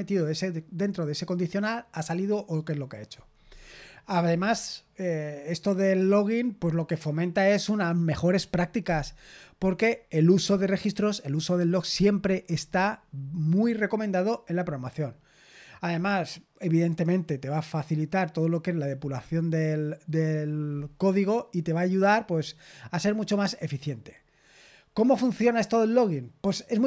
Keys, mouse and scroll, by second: 22.2-26.8 scroll down 1.